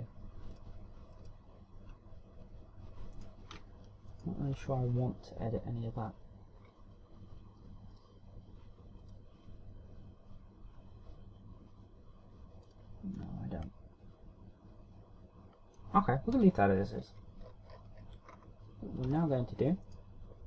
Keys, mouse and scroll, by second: 0.0 click, 1.3 click, 1.9 click, 4.1 right click, 5.1 right click, 5.5 Tab, 7.6-8.2 scroll down 1, 8.2 scroll down 1, 8.9 click, 10.0 click, 13.6 click, 14.1 middle click, 17.3 KP_1, 17.9-19.2 scroll down 15, 19.3-20.0 scroll up 2, 20.0 Tab.